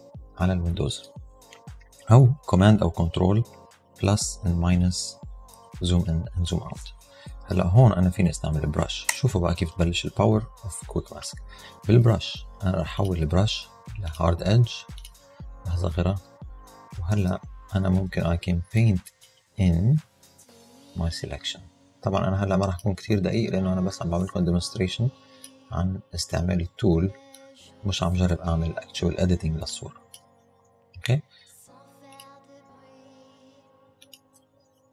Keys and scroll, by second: 4.1 super+-, 4.6 super+=, 5.1 super+-, 5.6 super+=, 9.1 b, 15.3 [, 17.2 [.